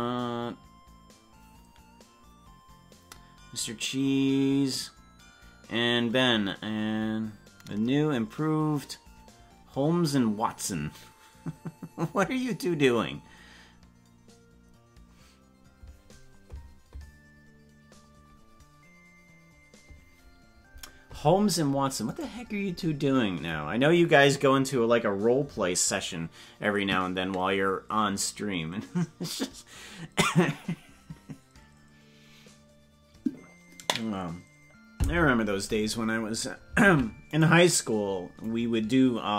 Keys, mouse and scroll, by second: 37.8 right click, 38.4-39.3 drag.